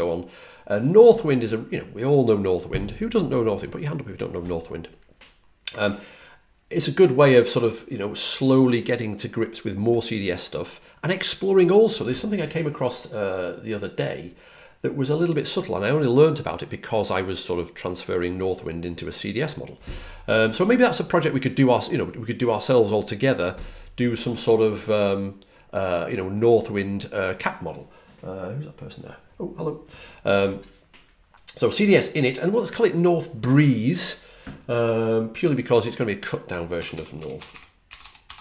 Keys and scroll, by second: 36.4-38.4 typing.